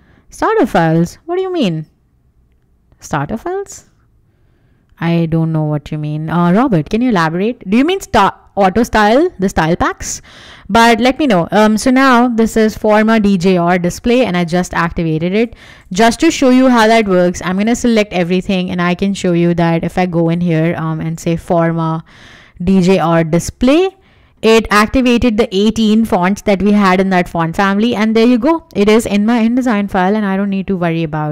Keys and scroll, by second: 17.7 super+a, 20.7-22.0 typing, 24.9 Escape.